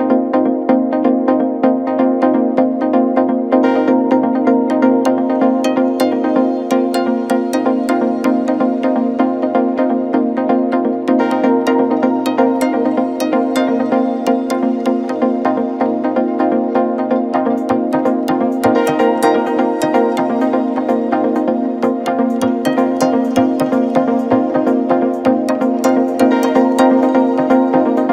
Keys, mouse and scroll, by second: 0.9 e, 2.0 e, 3.7 e, 4.9 KP_7, 5.5 scroll up 1, 5.7-6.1 scroll down 1, 6.1 click, 6.3-6.8 scroll down 2, 6.8 s, 9.0 s, 10.5 click, 10.9 s, 12.3 click, 12.6 s, 13.8 click, 14.2 s, 15.8 click, 16.2 s, 17.4 click, 17.9 s, 18.8 click, 19.1 s, 21.0 g, 22.2 KP_1, 22.9 middle click, 23.6 KP_7, 24.0-24.4 scroll up 1, 24.4 click, 24.9 g, 27.5 click, 27.9 s.